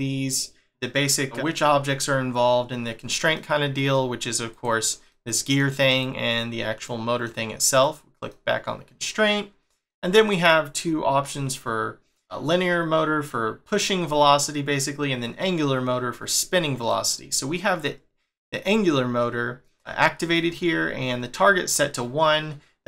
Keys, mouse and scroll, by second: 3.3 middle click, 4.5 click, 5.1 middle click, 5.9 click, 6.8 middle click, 7.8 click, 8.3 middle click, 16.9 middle click, 20.1 scroll up 2, 22.6 scroll up 2.